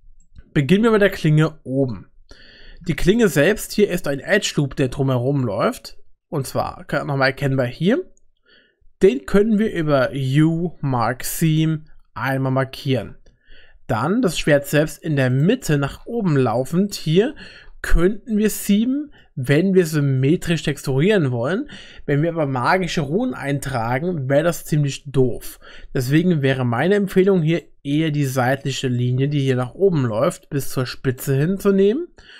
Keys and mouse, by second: 0.2 shift+middle click, 1.4 Tab, 2.5 2, 3.1 alt+click, 7.7-9.6 middle drag, 10.1 u, 15.3 click, 16.6 shift+middle click, 18.5 middle click, 26.0 middle click, 28.2 middle click, 29.0 shift+click, 30.1 click.